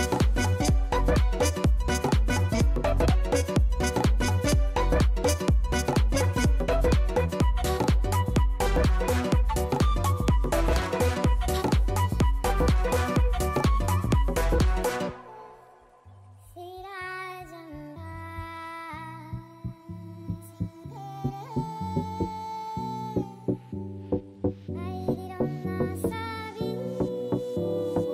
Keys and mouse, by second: 9.6 click, 10.2 click, 10.6 click, 12.6 click, 13.6 m, 13.9 d, 14.3 shift+o, 14.5 l, 14.6 Return, 16.4 right click, 16.8 click, 16.9 click, 17.4 shift+click, 18.0 shift+click, 18.7 right click, 20.8 click, 21.7 alt+click, 22.2 alt+middle click, 22.5 alt+click, 22.8 alt+click, 24.1 right click, 25.4 click, 28.0 click.